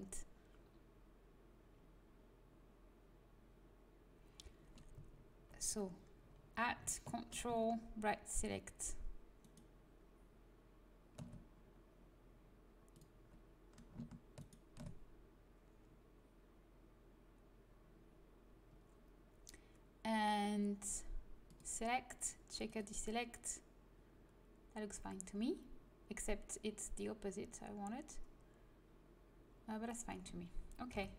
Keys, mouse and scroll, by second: 9.3-11.0 drag, 12.8-15.3 drag, 14.3-15.9 right drag, 22.7 click, 30.8 Delete.